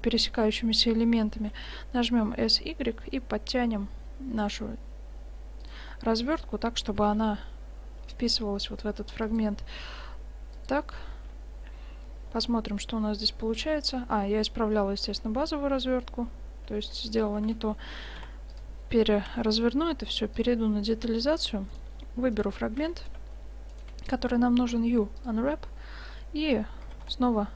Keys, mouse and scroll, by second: 1.4 s, 5.9-8.0 middle drag, 6.9 g, 9.7 s, 11.2 Tab, 14.3-16.2 middle drag, 16.7 Tab, 17.4 a, 17.6 a, 18.2 u, 19.4 Tab, 20.4 click, 21.0 Tab, 21.0 click, 22.4-23.8 drag, 24.6 click, 24.7 u, 25.4 click, 25.9-27.5 middle drag, 26.9 g.